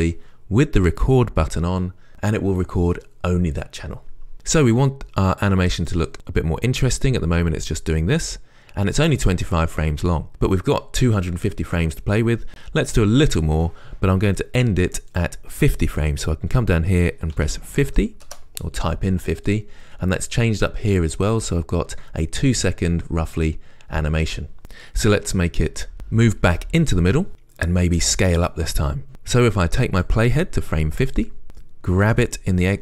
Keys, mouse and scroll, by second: 6.1-32.8 right drag, 24.6-30.3 drag, 32.3 g.